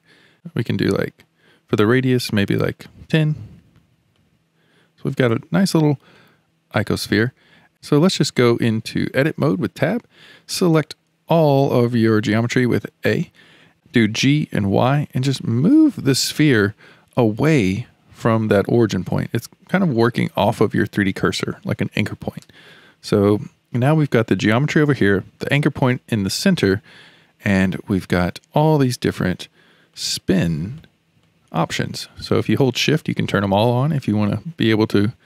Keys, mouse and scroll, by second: 2.2-4.3 drag, 6.1-7.7 middle drag, 7.7 Tab, 9.4 Tab, 11.9 alt+a, 12.9 a, 14.2 g, 28.2 click, 29.3 click, 29.9 click, 30.8 click, 31.2 click, 31.7 click, 32.7 shift+click, 33.2 shift+click.